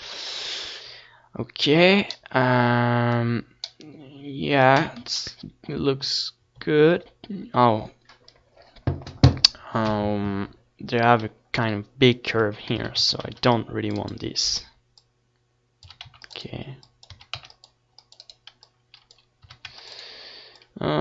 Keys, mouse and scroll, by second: 0.5-3.7 middle drag, 6.0 KP_7, 6.6 ctrl+KP_7, 11.0-12.5 middle drag, 12.3 Tab, 12.5 z, 12.8 a, 13.0 c, 13.7-15.6 right drag, 14.6-15.6 drag, 14.6-15.6 middle drag, 15.6 a, 15.7 c, 16.7 a, 16.8 c, 18.7 a, 18.9 c, 20.2 z, 20.5 Tab.